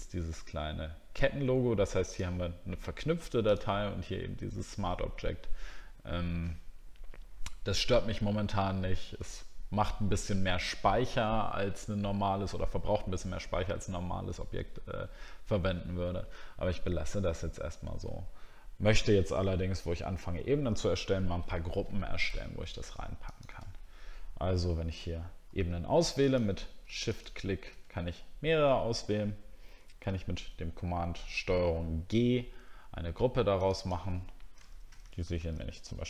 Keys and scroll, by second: 31.6 ctrl+g, 34.7 shift+h.